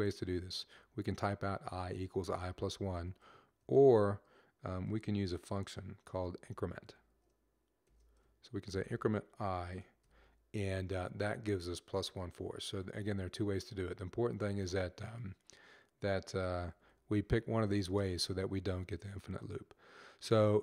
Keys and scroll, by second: 7.6-9.9 typing, 16.2-16.9 typing, 20.0 typing.